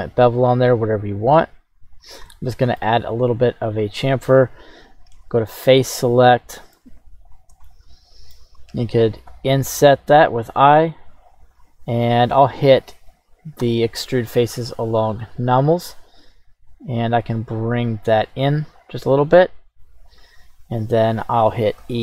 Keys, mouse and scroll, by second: 1.9 click, 2.2 scroll down 1, 2.3 middle click, 4.0 right click, 5.1 Tab, 5.5 right click, 6.4 middle click, 7.3 shift+right click, 7.7 middle click, 8.6-9.3 scroll up 1, 9.3 i, 11.1 click, 13.6 q, 18.8 click.